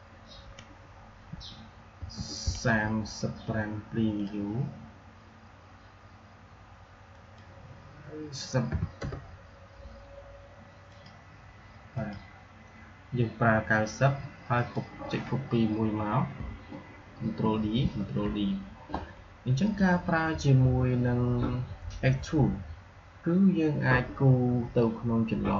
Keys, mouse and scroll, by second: 4.0 click, 7.0 click, 10.8 click, 14.4 click, 17.0 ctrl+d, 19.5 click.